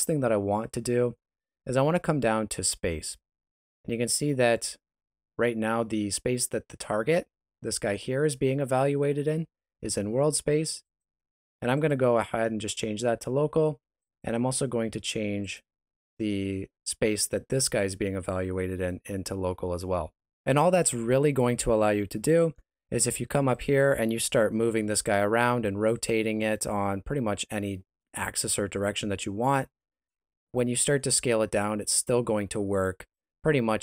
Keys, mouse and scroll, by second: 10.8 click, 14.0 click, 22.6 scroll down 1, 22.8 middle click, 23.5 right click, 24.6 g, 25.3 r, 26.6 r, 30.1 middle click, 31.0 s.